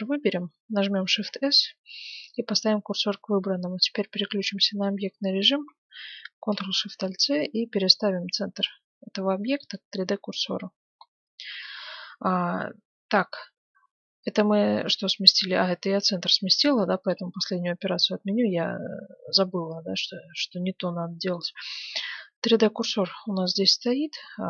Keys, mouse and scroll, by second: 1.1 shift+s, 3.1 Tab, 10.3-14.1 middle drag, 16.9 ctrl+z, 17.5-19.3 middle drag, 19.3-22.1 middle drag, 22.2 middle click, 23.6-24.4 middle drag.